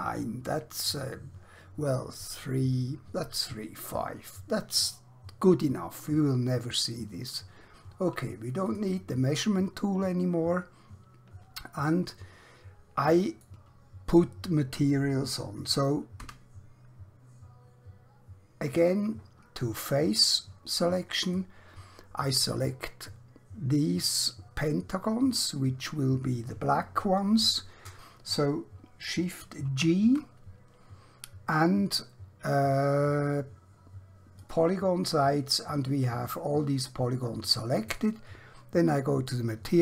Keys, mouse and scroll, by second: 8.7 click, 11.9 middle click, 16.1 3, 21.2 click, 29.8 g, 34.3 click, 35.6 middle click, 39.3 click.